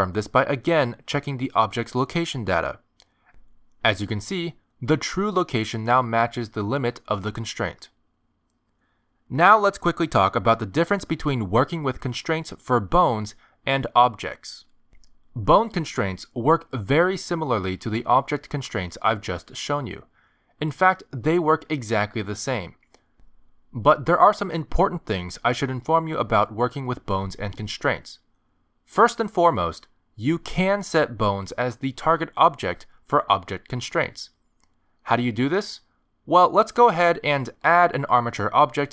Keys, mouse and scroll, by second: 3.2 g, 38.0 click.